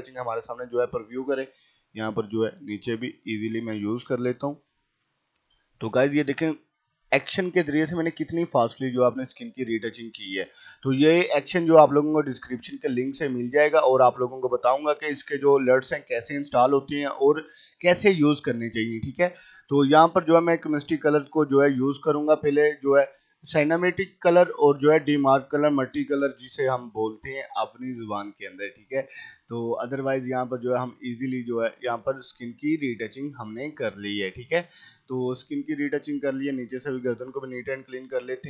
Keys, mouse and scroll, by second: 0.7-1.3 scroll down 1, 1.3 [, 1.5-4.8 drag, 4.8 ], 5.1-7.8 drag, 7.8 scroll up 1, 8.8 ], 9.0 click, 10.0 [, 10.1 click, 11.4 scroll up 1, 11.5 [, 11.8 click, 12.6 typing, 12.9-14.3 drag, 14.3 [, 14.6 click, 15.7 [, 16.1-18.6 drag, 18.6-19.7 typing, 18.9 click, 19.3 scroll down 1, 19.9-21.7 drag, 22.7 typing, 23.0 click, 23.0-25.8 drag, 25.8 [, 25.9 scroll down 1, 26.1 [, 26.5 click, 27.8 scroll up 1, 28.0 ], 28.1 click, 28.5-29.0 scroll up 1, 29.0 click, 29.1 click, 29.8-30.2 scroll up 1, 30.4 typing, 30.8-32.4 drag, 32.4-32.7 scroll down 1, 33.5 ], 33.8 click, 34.4-34.7 scroll down 1, 36.1-36.7 typing, 37.0-38.4 drag.